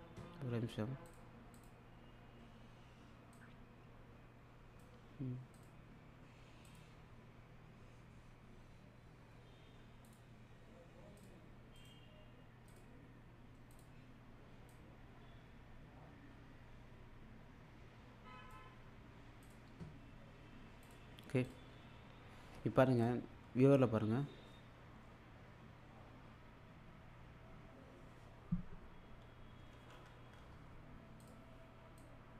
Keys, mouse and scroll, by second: 1.1 click, 3.3-4.9 click, 10.1 click, 11.8 right click, 12.7-18.7 drag, 20.8 click, 23.0 click, 29.6 k, 31.2-32.3 drag.